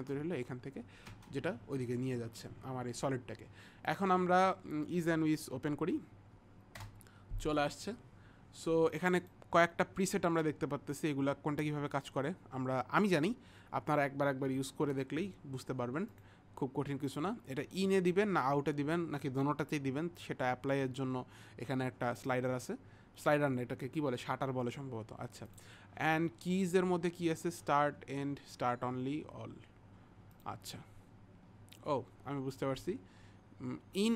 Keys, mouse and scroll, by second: 3.9 click, 9.3 click, 16.2 click, 17.1 click, 22.2 click, 30.4 click.